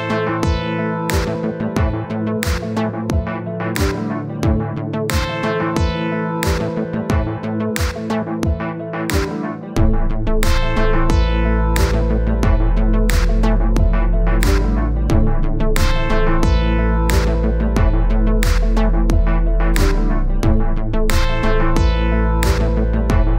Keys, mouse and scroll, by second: 0.7-1.9 middle drag, 2.5-3.7 scroll up 30, 3.7 click, 3.9-4.3 scroll down 10, 5.0-6.2 drag, 6.3-7.5 middle drag, 7.7 KP_1, 8.5 click, 9.2-10.4 scroll up 12, 10.4 click, 10.9-15.7 drag, 15.9-17.1 drag, 18.1-23.3 drag.